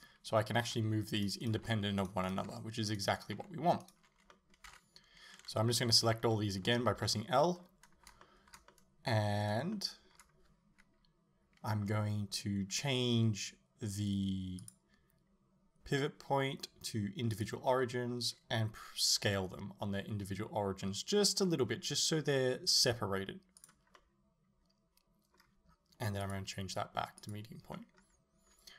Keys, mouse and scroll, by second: 0.0 right click, 0.7 g, 1.5 right click, 1.6 g, 2.3 right click, 2.5 g, 3.2 right click, 3.4 g, 3.9 right click, 4.4-14.6 middle drag, 4.7 a, 6.1 l, 14.6-23.7 drag, 19.2 s, 24.0-26.3 middle drag, 26.3-27.8 drag, 27.8-28.7 middle drag.